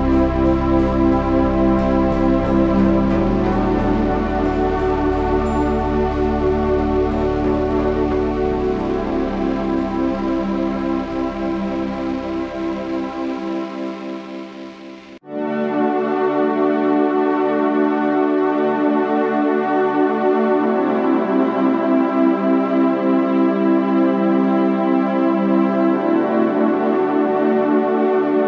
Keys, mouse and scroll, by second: 1.7 g, 3.1 g, 4.8 KP_1, 5.1 z, 6.2 z, 6.7 z, 7.1 z, 8.4 g, 9.9 z, 10.6 z, 12.2 g, 14.3 g, 17.8 g, 20.2 g, 21.5 z, 21.8 z, 25.2 KP_3, 25.3 z, 25.8 z, 26.8 click, 27.6 g.